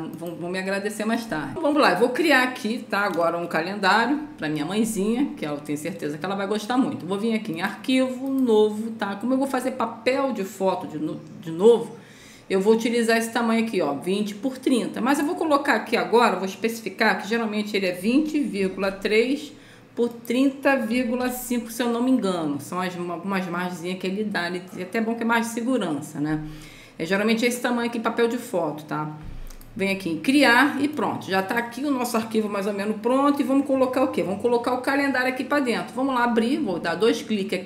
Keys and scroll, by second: 18.8 KP_3, 20.8 ., 21.2 5.